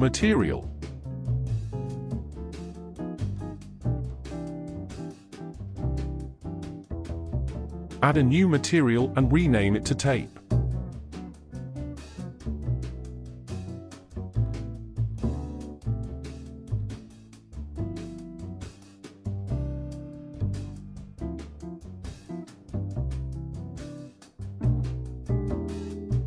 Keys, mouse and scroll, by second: 7.5-8.7 scroll up 5, 8.7 click, 10.4-16.3 drag, 20.2-23.2 drag, 23.7-26.2 drag.